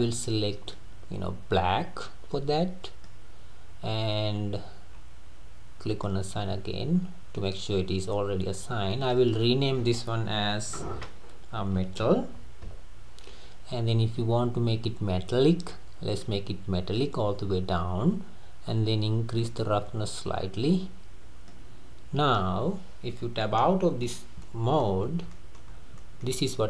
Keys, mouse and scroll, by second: 4.5-5.0 scroll up 6, 5.9-12.4 drag, 14.1-14.5 scroll down 3, 15.3 scroll down 2, 16.2-17.4 drag, 17.4-18.1 scroll down 3, 19.4-22.4 drag, 23.7 Tab, 24.1 click, 24.5-26.3 middle drag, 25.0-25.3 scroll up 3, 25.6 scroll up 1, 25.7-26.0 scroll down 4, 26.3-26.6 scroll up 1.